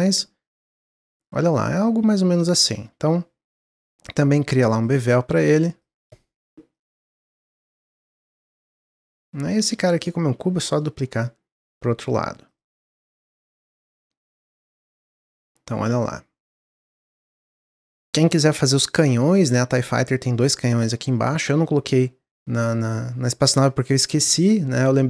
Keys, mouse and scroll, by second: 1.0-1.4 scroll up 1, 1.4-3.5 middle drag, 3.5 click, 4.8-6.4 drag, 6.7-8.4 shift+drag, 8.4-8.7 scroll down 2, 8.7-9.7 middle drag, 9.7 shift+d, 12.9 drag, 13.1 click, 13.4-14.0 middle drag, 14.0 scroll down 1, 14.2-17.2 middle drag, 18.1-18.6 shift+middle drag, 18.6-19.0 scroll up 1, 19.0-21.3 middle drag, 21.3-24.4 drag.